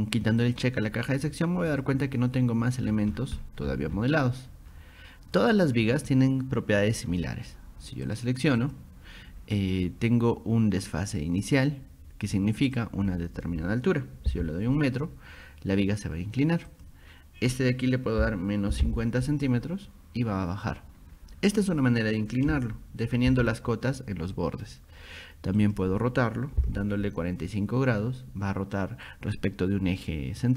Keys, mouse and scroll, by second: 0.5 click, 1.7 click, 2.9 scroll down 2, 3.7-4.4 scroll up 4, 4.7 middle click, 8.1 click, 8.6 click, 12.6 click, 16.7 click, 21.7 click, 23.0 click, 25.6 click.